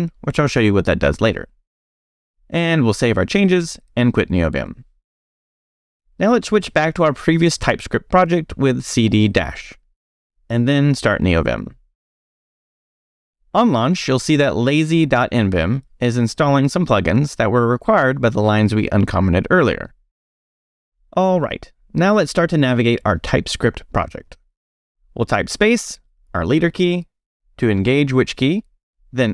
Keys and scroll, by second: 1.9 Escape, 2.3 shift+;, 2.8 shift+w, 3.4 q, 4.0 a, 4.8 Return, 22.0 q, 24.7 space.